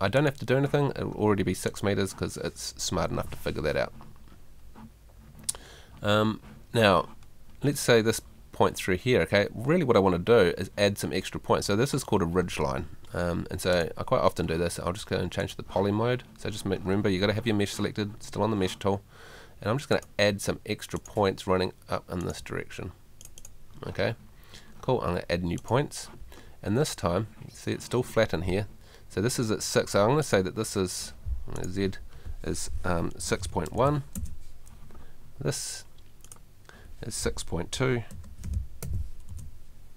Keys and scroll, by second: 2.9 Escape, 33.2 6, 38.1 6.